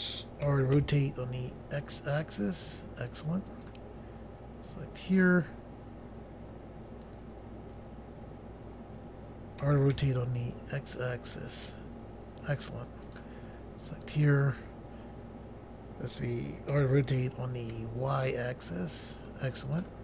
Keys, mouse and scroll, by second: 0.4-0.7 typing, 3.5 right click, 5.0 click, 7.0 click, 9.6-9.9 typing, 13.0 right click, 14.0 click, 16.7 r, 17.7 y, 19.6 right click.